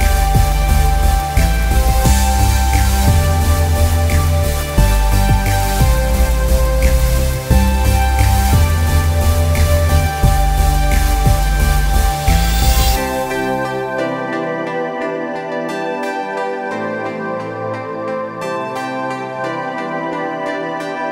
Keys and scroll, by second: 0.2 t, 3.7 Return, 4.7 ctrl+j, 5.5 ctrl+t, 8.4 Return, 9.4 ctrl+j, 10.3 ctrl+t, 13.2 Return, 19.1 ctrl+alt+shift+e.